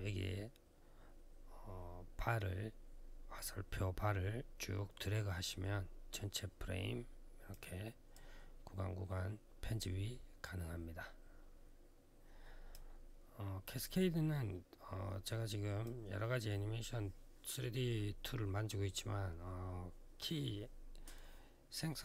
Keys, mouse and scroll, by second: 3.2 click, 7.9 click, 10.2 click, 13.6 click.